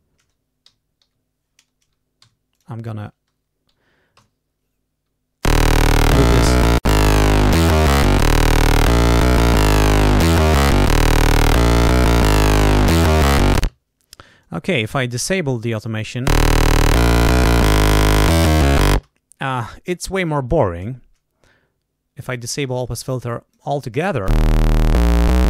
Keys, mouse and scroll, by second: 0.6 l, 2.2 g, 2.5 click, 5.4 l, 7.5 click, 8.6 right click, 10.9 click, 12.0 click, 13.5 space, 14.3-15.4 drag, 15.8 click, 16.2 space, 18.8 space, 22.5 click, 23.2 click, 24.2 space.